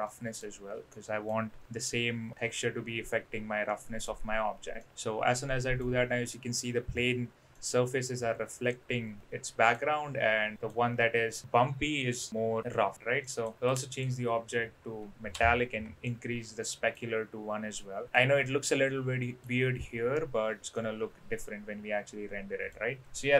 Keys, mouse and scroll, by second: 0.0-0.4 middle drag, 0.8-1.2 middle drag, 2.3-4.0 middle drag, 4.8-5.8 middle drag, 7.5-9.7 middle drag, 10.5 middle click, 13.2 middle click, 13.7-16.0 drag, 16.0-16.9 middle drag, 17.7-18.1 middle drag, 18.4-19.4 middle drag, 20.7-22.7 middle drag, 23.0-23.3 middle drag.